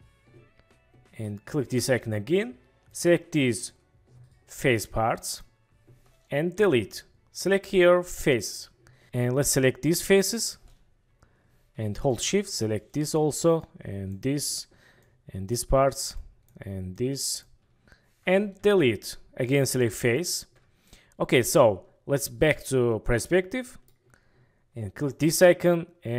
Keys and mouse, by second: 2.9-3.7 drag, 4.5-5.4 drag, 6.6 Delete, 9.0 KP_1, 9.4-10.3 drag, 12.2-12.9 shift+drag, 13.6-14.1 shift+drag, 15.2-15.5 shift+drag, 16.3 shift+click, 17.0-17.4 shift+drag, 18.6 Delete, 22.5-23.9 middle drag, 25.0 middle click.